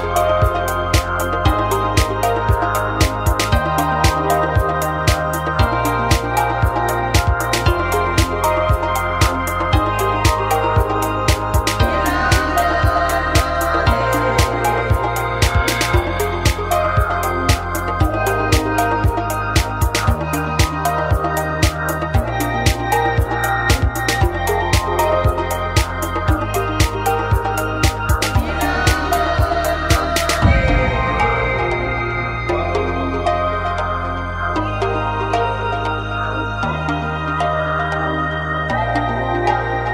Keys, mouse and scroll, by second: 1.1 a, 1.4-2.5 drag, 4.3 t, 4.7 w, 6.9 click, 9.5 a, 10.2-12.2 right drag, 12.2 middle click, 12.6 w, 13.7 click, 14.6-15.8 right drag, 15.7 w, 15.8 click, 17.6 click, 20.5 w, 22.0 click, 23.5-27.0 right drag, 26.3 click, 27.7-29.4 right drag, 28.0-29.4 drag, 29.7 right click, 30.1 click, 30.9 right click, 31.3 click, 32.0-34.3 right drag, 32.5-34.3 drag, 34.5-35.5 right drag, 34.9-36.1 drag, 36.4-37.8 right drag, 36.7-37.8 drag, 38.0-39.9 right drag, 38.5-39.5 drag, 39.8-39.9 drag.